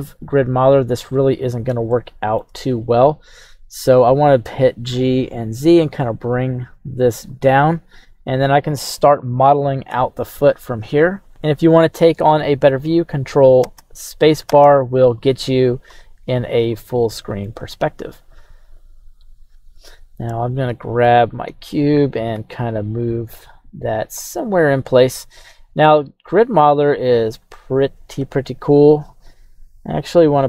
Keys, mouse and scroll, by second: 0.6-1.7 scroll up 1, 1.9-2.5 shift+middle drag, 4.5 g, 4.9 z, 7.3 click, 11.3 shift+middle click, 11.3 scroll up 1, 14.3 right click, 14.5 ctrl+space, 15.2-15.7 scroll down 3, 15.7-16.2 scroll up 4, 16.7 shift+middle click, 20.3 right click, 21.0 g, 21.4 x, 22.3 y, 26.2-29.2 drag, 29.3 g.